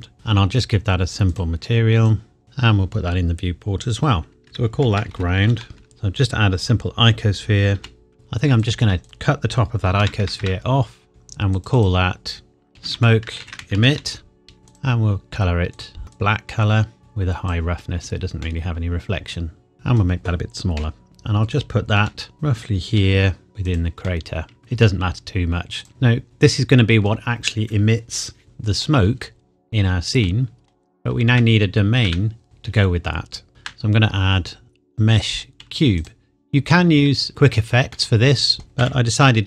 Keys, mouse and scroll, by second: 1.3 click, 2.4 scroll down 1, 4.4 click, 4.8 shift+g, 5.2 r, 5.3 o, 5.7 u, 7.8 g, 8.1 Tab, 8.6 click, 9.0 KP_1, 10.0 ctrl+KP_Add, 11.1 click, 12.7-13.9 typing, 14.7 click, 18.4 middle click, 20.8 KP_1, 22.0 g, 22.3 click, 23.0 KP_7, 23.5 g, 23.6 click, 24.0 middle click, 24.6 click, 24.8 g, 25.8 click, 25.9 middle click, 29.3 scroll down 1, 30.3 middle click, 30.3 middle click, 31.3 Tab, 33.5 shift+a, 36.0 click, 36.7-37.0 scroll down 1, 38.0 middle click, 38.8 s.